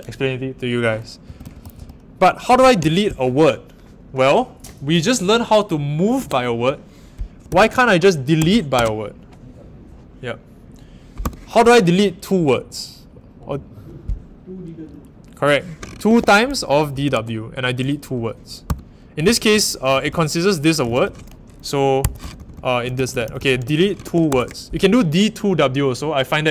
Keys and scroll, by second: 6.1 w, 7.4-9.2 typing, 11.2 u, 16.1-17.6 typing, 18.6-24.2 typing.